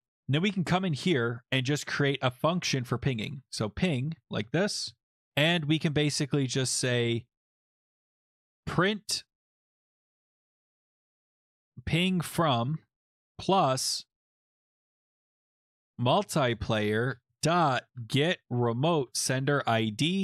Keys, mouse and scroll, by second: 0.4 click, 2.0 Return, 2.1-5.2 typing, 8.1-13.2 typing, 14.4-15.6 typing, 15.9 Down, 16.1 Down, 16.2 Down, 16.4 Down, 16.5 Down, 16.7 Down, 17.1 Return, 17.2-19.3 typing.